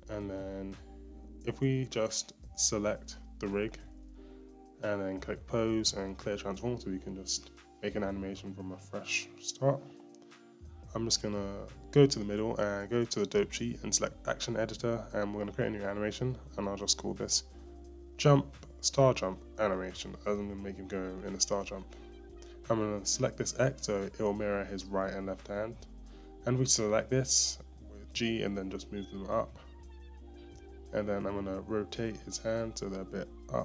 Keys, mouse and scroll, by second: 0.0 click, 0.9 scroll, 1.1-1.7 scroll up 7, 1.7-2.4 middle drag, 2.3 scroll, 2.4-3.8 scroll up 2, 4.3 click, 5.4 a, 8.8-10.0 drag, 8.8-9.4 scroll down 3, 9.4 middle click, 10.0 KP_1, 10.3-10.8 scroll up 4, 10.8-12.7 shift+middle drag, 17.0-21.6 drag, 24.3 click, 28.8 g, 32.9 r.